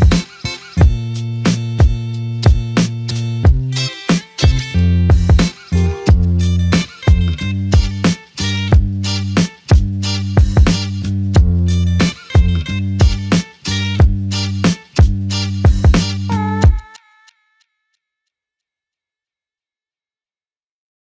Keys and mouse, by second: 3.3 f, 5.8 double click, 11.0 alt+click, 14.0 double click, 15.8 alt+click, 16.9 double click, 20.2 alt+click.